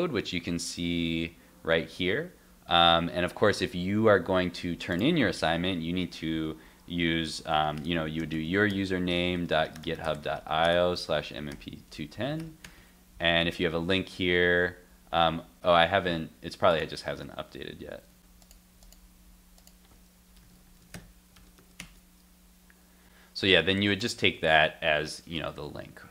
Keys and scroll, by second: 17.2 shift+super+r, 17.9 shift+super+r, 18.1 shift+super+r.